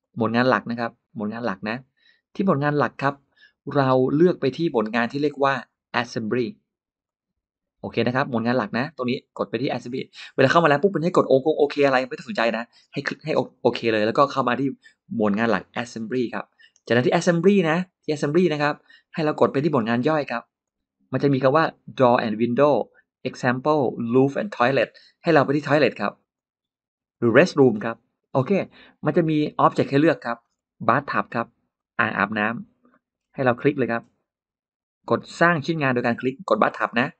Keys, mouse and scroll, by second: 6.9 click, 20.5 click, 26.2 click, 29.9 middle click, 29.9 scroll down 2, 30.3 scroll up 2, 31.6 click, 32.7-33.6 scroll up 5, 32.8 middle click, 33.7 middle click, 36.5 click.